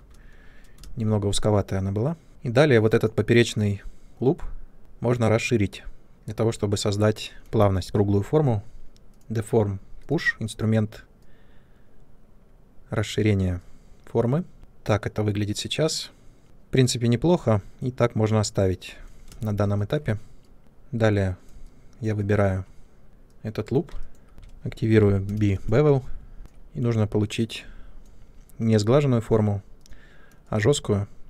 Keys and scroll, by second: 0.7 ctrl+space, 2.3 2, 19.2 space, 20.6 3, 25.0 b.